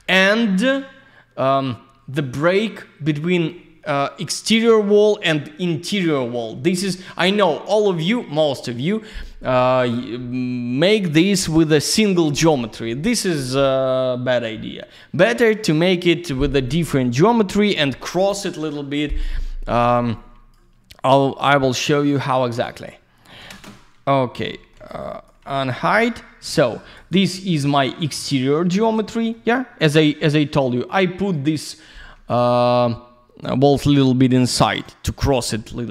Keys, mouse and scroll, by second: 16.5 click, 16.7 click, 20.1 click, 21.6 click, 21.7 click, 22.4 middle click, 24.1-24.4 scroll down 1, 24.5 alt+middle click, 24.8 alt+z, 24.9 click, 25.4 alt+middle click, 25.9 click, 26.6 alt+middle click, 26.8 middle click, 26.9 click, 27.1 double click, 28.6 alt+q, 29.1 alt+middle click, 31.0 middle click.